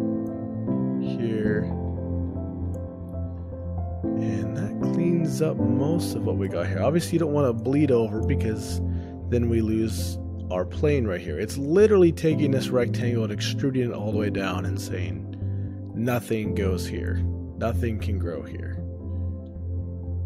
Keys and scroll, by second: 3.1 shift+space, 7.1 ctrl+alt+o, 8.6 shift+space, 13.5 ctrl+alt+o, 15.2 ctrl+alt+o.